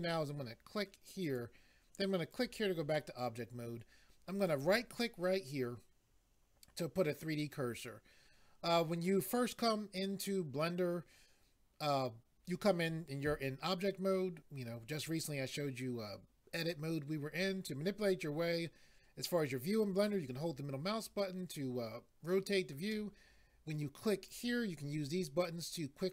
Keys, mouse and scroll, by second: 1.2 click, 2.3 click, 4.4 right click, 20.0 middle click, 24.3 click.